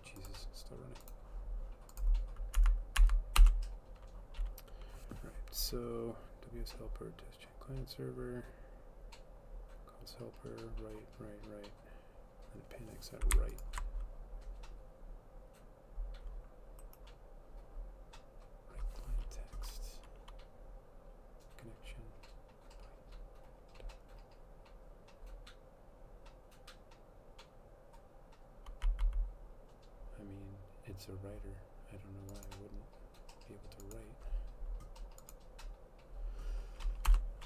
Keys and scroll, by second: 3.5 Up, 3.5 Return, 37.1 Return.